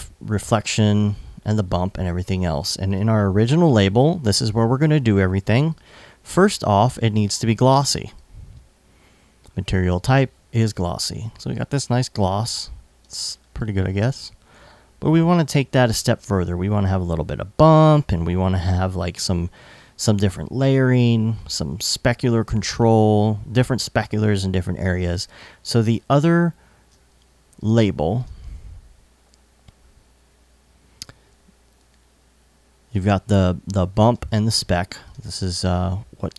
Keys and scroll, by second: 17.6 alt+super+s, 18.5 super+s, 24.7 super+Tab.